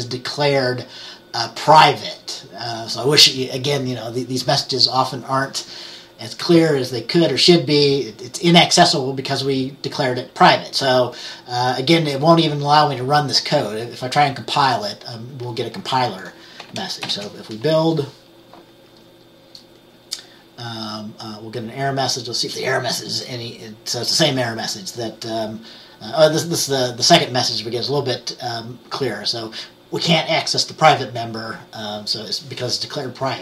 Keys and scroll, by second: 17.2 ctrl+b.